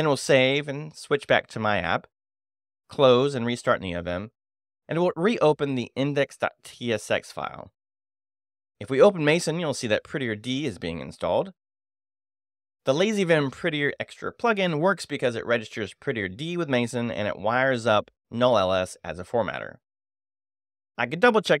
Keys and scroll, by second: 0.2 ctrl+|, 0.7 Escape, 1.0 shift+;, 1.3 shift+w, 1.4 q, 1.6 a, 1.8 Return, 2.8 n, 2.9 v, 2.9 i, 3.4 Return, 5.8 space, 5.9 f, 6.0 r, 6.7 Return, 7.4 shift+;, 7.5 shift+m, 7.6 shift+a, 7.9 Return, 21.5 shift+;.